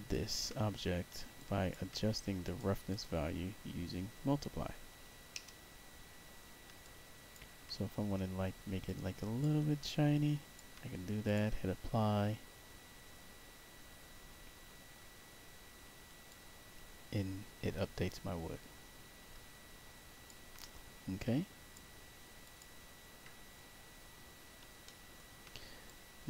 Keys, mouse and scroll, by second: 0.4 middle click, 0.7 middle click, 0.8 middle click, 1.3 alt+click, 2.4 click, 2.8 click, 6.7 alt+click, 8.8 click, 9.8 alt+click, 11.2 click, 16.2-20.2 alt+drag, 21.1 click, 22.3 click, 23.3 middle click, 23.8 middle click, 24.8 alt+middle click, 25.8 click.